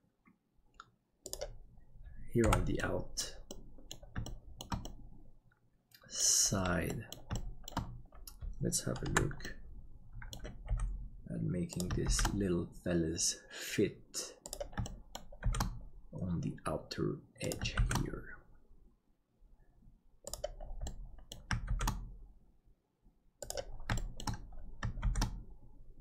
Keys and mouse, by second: 2.9 middle click, 3.6 middle click, 4.4 shift+middle click, 4.8-6.6 middle drag, 7.0 middle click, 7.5 shift+middle click, 9.1 KP_Decimal, 9.5 middle click, 10.7 g, 12.1 shift+d, 14.9 shift+middle click, 15.4 shift+d, 20.8 middle click, 21.7 shift+d, 24.1 shift+middle click, 25.1 shift+d.